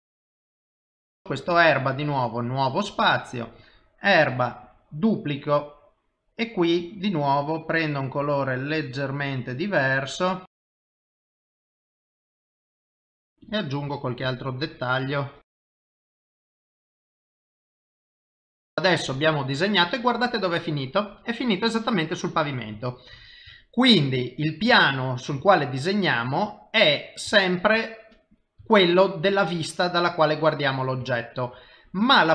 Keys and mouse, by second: 0.1 click, 0.1 click, 0.6 click, 2.0 click, 2.8 click, 6.8 click, 10.6 click, 11.3 click, 13.1 typing, 13.3 click, 13.9 click, 15.1 click, 15.5 click, 15.7 click, 15.9 click, 16.0 click, 16.2 click, 16.3 click, 16.4 click, 16.7 click, 16.9-18.1 click, 17.4 click, 18.2 click, 18.7 click, 19.9 middle click, 23.6 shift+middle click, 24.2 middle click, 24.9 ctrl+middle click, 25.5 shift+middle click, 26.0 middle click, 27.3 shift+middle click, 27.9 middle click, 28.7 shift+middle click, 29.4 middle click, 31.1 shift+middle click, 31.7 middle click.